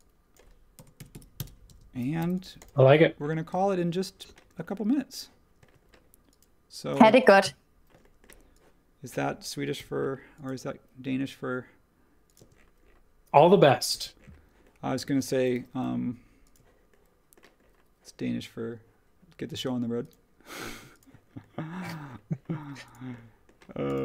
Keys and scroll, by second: 0.5-2.2 typing, 3.5-4.5 typing, 5.6 space, 9.7 m, 12.4 space, 13.9 h, 15.5 b.